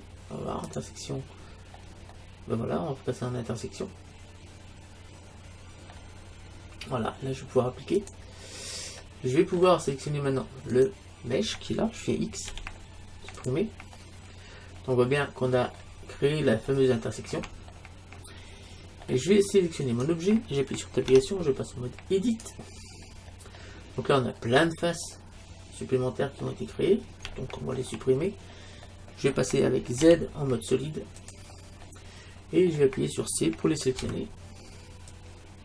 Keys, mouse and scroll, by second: 2.1-4.0 middle drag, 8.0-9.7 drag, 9.0 alt+', 9.5 alt+', 10.8-12.6 right drag, 12.5 x, 14.0-15.6 middle drag, 16.1-19.5 middle drag, 19.9-21.8 right drag, 21.1 Tab, 23.1 middle click, 24.7-30.6 middle drag, 30.1 z, 31.9-34.0 middle drag, 34.0 c.